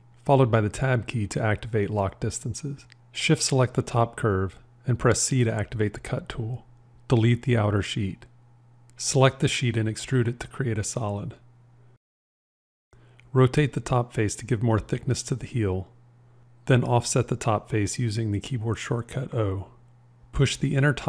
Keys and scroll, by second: 1.3 Tab, 5.6 c, 10.8 e, 13.9 r, 14.2 v, 18.5 o.